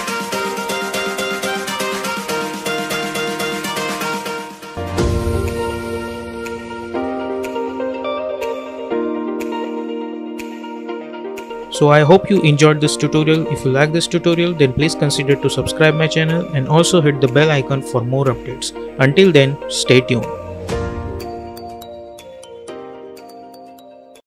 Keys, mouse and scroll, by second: 1.0 space, 1.5 n, 1.8 space, 4.6 space.